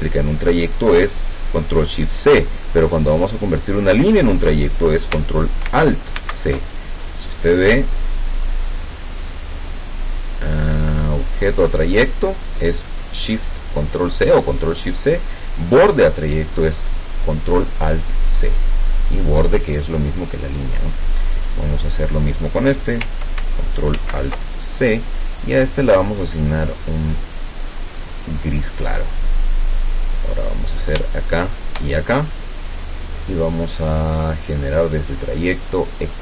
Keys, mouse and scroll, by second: 3.2 click, 6.2 ctrl+alt+c, 8.0 click, 19.0 click, 21.6 click, 24.0 ctrl+alt+c, 26.0-28.5 drag, 30.4 click, 31.4 shift+click, 33.1 click.